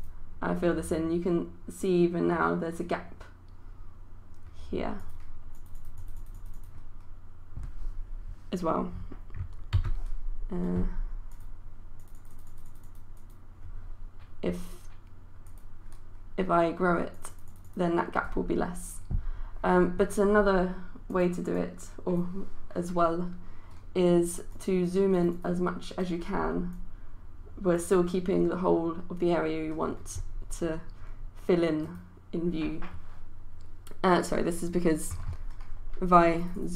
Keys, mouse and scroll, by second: 5.9 click, 9.8 ctrl+z, 11.3-36.7 drag.